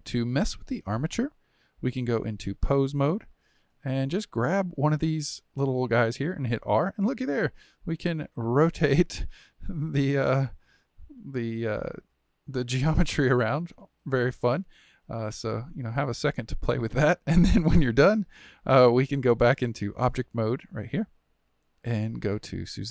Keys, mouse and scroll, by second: 2.3-4.3 drag, 6.2 r, 8.0 click, 8.2 r, 9.7 click, 10.0 r, 11.9 click, 12.1 r, 13.8-16.8 middle drag, 17.5-19.9 shift+middle drag, 19.9-22.9 drag.